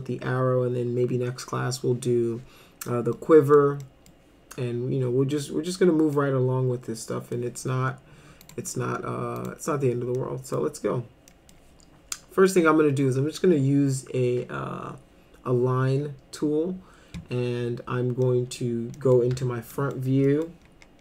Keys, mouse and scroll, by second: 3.2 middle click, 3.8 middle click, 6.2-7.3 middle drag, 8.4 click, 9.4 click, 10.2 middle click, 11.3 middle click, 18.2 middle click, 19.0 middle click, 19.3 f, 19.7 middle click, 20.3 middle click.